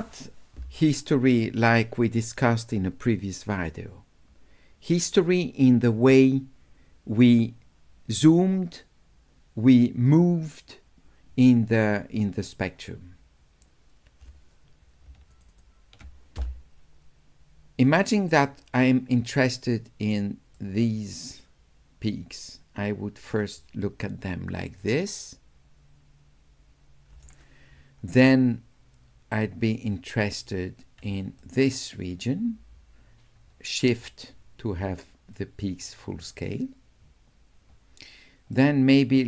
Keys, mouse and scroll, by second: 2.7-5.2 drag, 15.3 ctrl+click, 15.5 ctrl+click, 20.5-23.3 right drag, 24.9 right click, 25.1-26.3 drag, 26.3 right click, 26.4 click, 31.4 shift+click, 32.2-36.3 shift+right drag, 38.5 shift+right click, 38.8 shift+click.